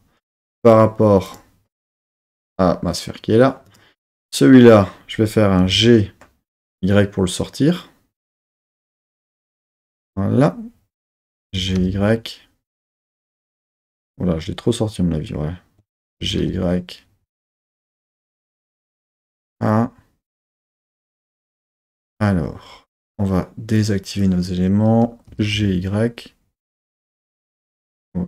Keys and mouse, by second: 0.6-2.3 drag, 5.6 click, 5.6 g, 6.5 y, 9.1-9.5 drag, 9.7 middle click, 11.5 g, 11.8 y, 13.1 click, 15.3 super+middle click, 16.2 g, 16.4 y, 19.0 click, 19.5 super+middle click, 20.1 super+click, 23.7 click, 25.2 g, 25.4 y.